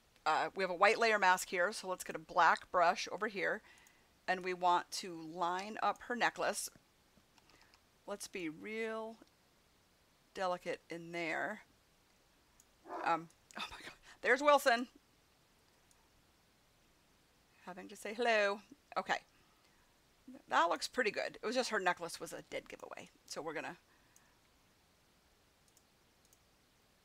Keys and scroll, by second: 7.3 [.